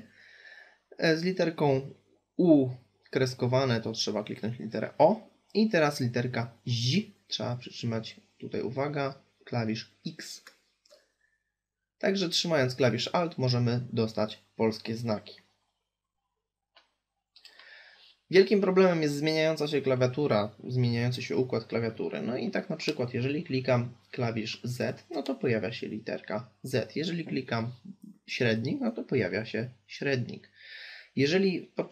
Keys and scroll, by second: 8.3 alt+x.